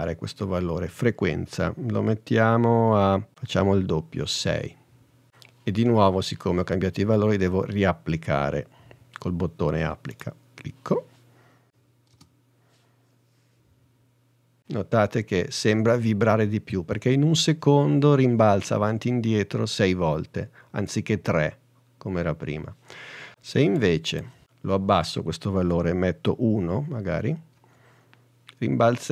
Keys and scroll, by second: 4.5 6, 11.7 space, 12.2 space, 27.6 i.